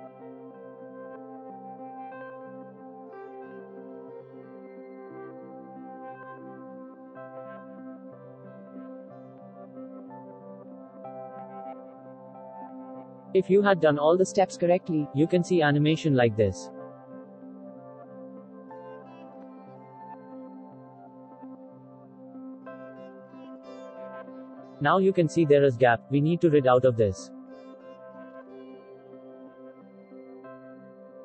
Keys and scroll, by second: 0.4 ctrl+x, 1.2 ctrl+v, 2.0 ctrl+x, 3.0 ctrl+v, 4.4 ctrl+v, 5.3 ctrl+x, 5.9 ctrl+v, 11.2 Delete.